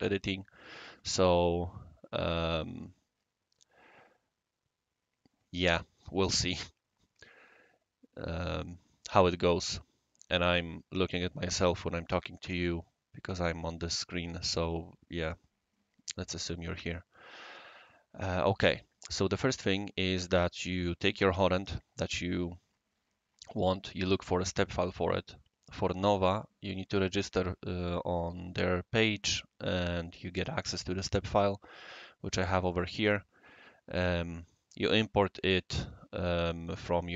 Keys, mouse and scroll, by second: 31.7 click, 32.7 click.